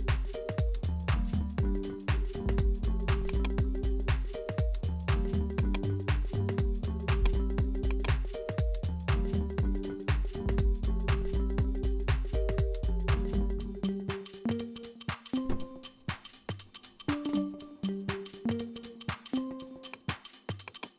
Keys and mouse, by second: 0.1-3.3 drag, 5.6-10.3 drag, 11.1 click, 12.0 0, 13.7-15.8 drag, 15.8 BackSpace, 15.9 BackSpace, 16.6 0, 19.1 s, 20.7 click.